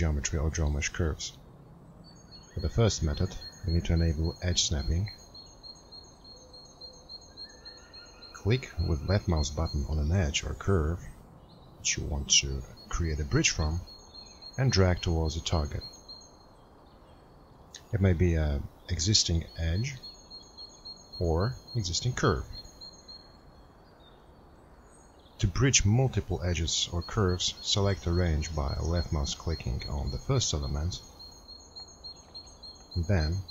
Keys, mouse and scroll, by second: 11.5 click.